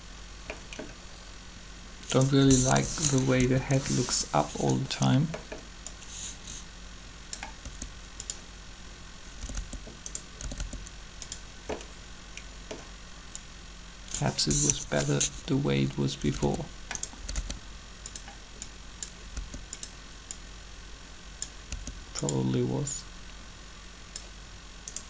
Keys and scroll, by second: 2.6 3, 3.2 Up, 7.6 r, 9.5-10.6 typing, 14.5 3, 15.6-17.3 typing, 19.3 typing, 20.8-21.7 typing.